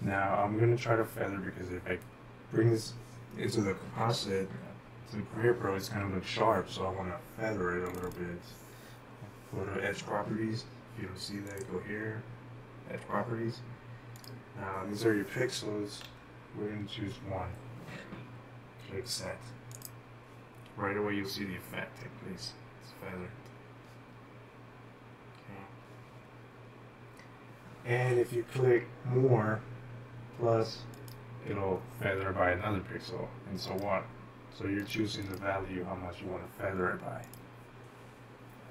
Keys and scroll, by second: 16.1 1.